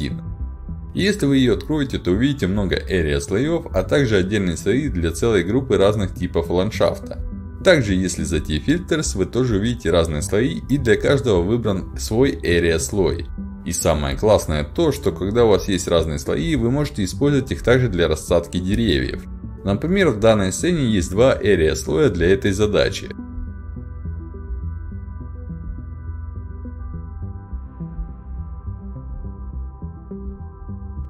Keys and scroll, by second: 6.7 w, 7.0 a, 20.8-21.8 typing, 24.7 a, 25.2 s, 26.1 d, 26.9 s, 29.4-30.8 typing.